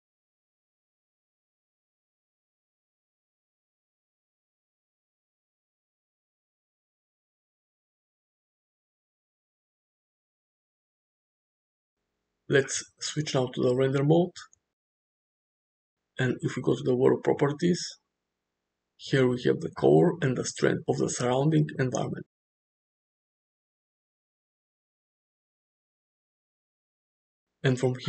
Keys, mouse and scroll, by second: 2.7 space, 13.6 click, 17.4 click, 20.5 click, 23.2 Escape, 24.3 ctrl+z, 25.5 click.